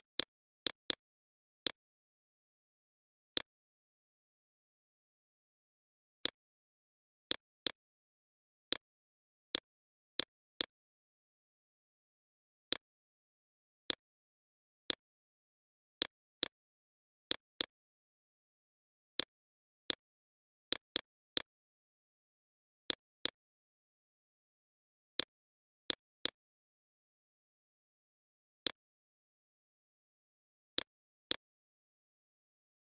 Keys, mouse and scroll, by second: 22.1 BackSpace, 22.9 click, 30.1 right click, 30.3 right click, 31.1 click.